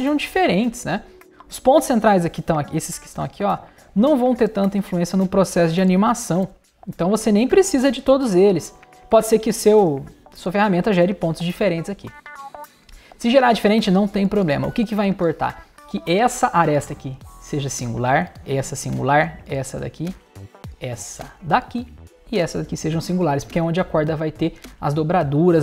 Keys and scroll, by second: 4.5 super+BackSpace, 6.4 super+BackSpace, 8.9 super+BackSpace, 11.0 super+BackSpace.